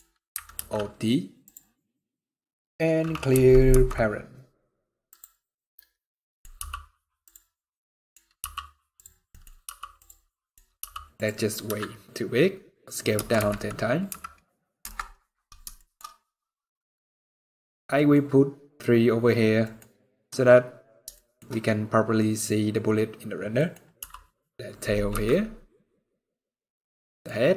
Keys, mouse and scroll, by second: 0.2 alt+d, 1.4 scroll down 1, 1.6 middle click, 3.4 alt+p, 5.3 scroll down 4, 6.0 middle click, 6.2 scroll up 1, 6.2 g, 7.4 scroll down 2, 7.5 middle click, 8.1 g, 9.0 middle click, 9.2 scroll up 2, 9.3 g, 10.0 scroll up 1, 10.0 middle click, 10.5 g, 11.3 s, 15.4 shift+middle click, 15.7 scroll up 2, 17.6 middle click, 17.8 scroll down 1, 19.3 middle click, 19.5 scroll up 2, 20.8 shift+middle click, 21.1 shift+scroll up 3, 21.8 scroll up 3, 22.1 scroll down 2, 22.7 scroll down 2, 23.2 middle click, 23.7 r, 25.0 middle click, 26.1 scroll up 2, 26.7-27.1 scroll down 2, 26.8 middle click, 27.1 scroll up 1, 27.5 scroll down 3.